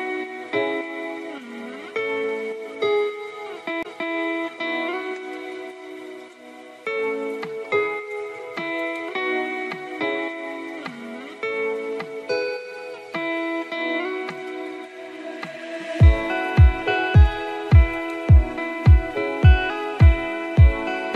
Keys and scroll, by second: 13.6 ctrl+t.